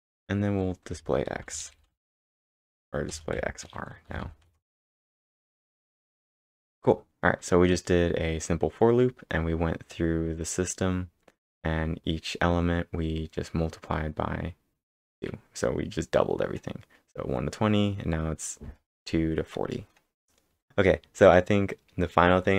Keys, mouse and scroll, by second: 0.9 Return, 1.4-3.1 typing, 4.6 ctrl+Return, 5.9-6.6 scroll down 4, 12.6 scroll down 1, 13.2 scroll down 1, 15.9 scroll up 3, 17.6 scroll down 6, 20.4 scroll up 1.